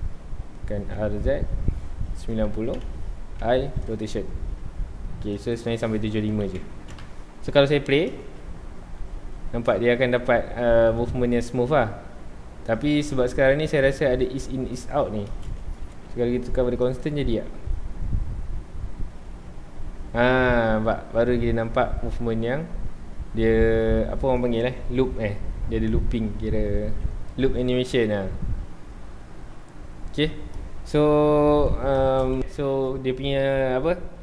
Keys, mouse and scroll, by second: 2.8 KP_Enter, 5.3-7.0 drag, 7.0 KP_Enter, 8.1 space, 8.1 space, 15.3 space, 16.0 t, 17.6 space, 31.9 space.